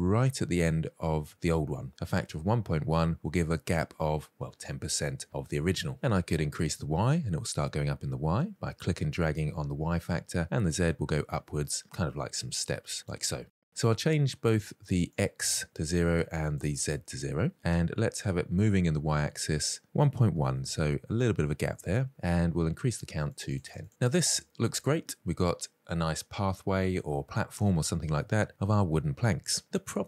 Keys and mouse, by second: 6.5-9.3 drag, 10.3-11.0 drag, 11.2-11.7 middle drag, 12.2-12.7 drag, 14.7-16.1 drag, 16.3 click, 17.3-17.7 middle drag, 18.4-18.8 shift+middle drag, 19.5 click, 21.0 middle click, 22.1 click, 22.2 click, 22.4 click, 22.7 click, 22.9 click, 23.3 shift+middle click, 23.5-24.1 middle drag, 24.2 shift+middle drag, 24.5-26.4 middle drag.